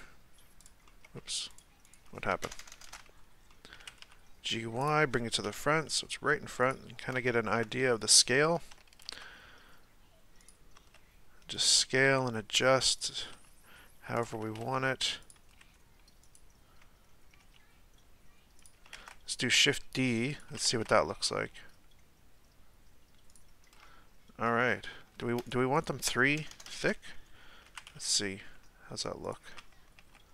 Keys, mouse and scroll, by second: 0.6 right drag, 0.8-1.5 middle drag, 1.5 right click, 1.8 right click, 2.4-2.8 ctrl+KP_Add, 3.5-3.8 middle drag, 3.8 g, 5.5 KP_1, 6.1 g, 6.9-7.3 scroll up 1, 7.3-7.7 shift+middle drag, 7.7-8.1 scroll up 1, 8.1-8.7 shift+middle drag, 8.7 s, 10.8 s, 12.0 g, 13.3 s, 14.4 s, 15.6 g, 17.4 g, 18.9 shift+d, 20.7 shift+d, 23.7-24.6 middle drag, 24.6 scroll down 1, 25.7 shift+right click, 26.4-26.8 ctrl+KP_Add, 27.6 g, 29.5 Tab, 30.0 Tab.